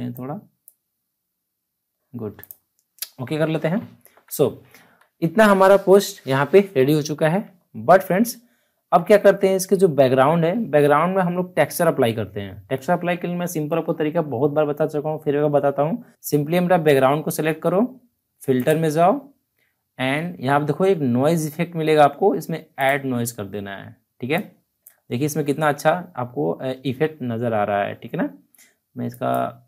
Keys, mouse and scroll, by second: 3.7 alt+scroll down 1, 4.6 alt+scroll down 1, 7.4 alt+Num_Lock, 7.4-7.7 alt+scroll down 1, 7.7 alt+scroll up 1, 8.7 alt+scroll up 1, 16.1 click, 18.5 click, 22.7-27.3 drag, 29.1 click.